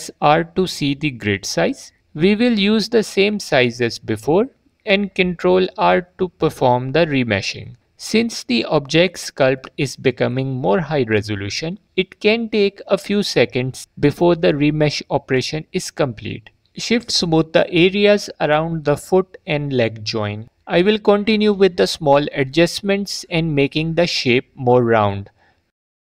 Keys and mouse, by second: 0.2 middle click, 2.1 middle click, 3.3 shift+r, 5.1 click, 7.5 ctrl+r, 8.0 alt+click, 10.4 f, 10.8 click, 11.1 shift+click, 20.6 middle click, 22.5 shift+click, 24.1 shift+middle click, 24.5 shift+middle click.